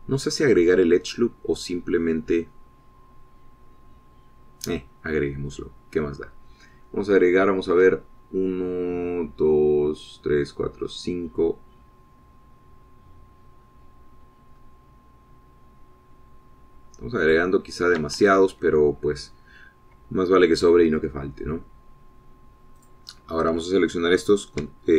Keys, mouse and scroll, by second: 5.7 scroll up 2, 15.0 scroll up 2, 15.5-17.5 scroll up 12, 18.0 scroll up 2, 18.5 click, 19.3 Escape, 24.1 click.